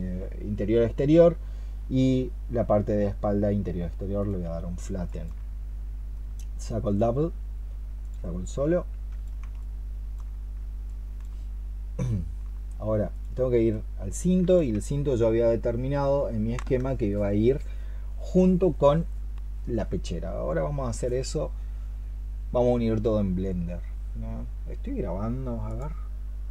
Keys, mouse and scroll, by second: 4.9 alt+click, 8.3 double click, 9.4 alt+click, 10.7 alt+click.